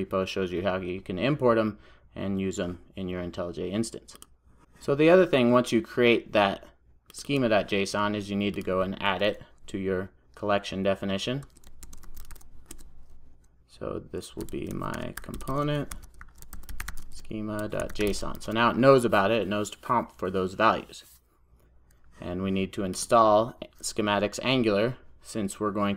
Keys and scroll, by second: 12.8 Return, 18.4 super+s.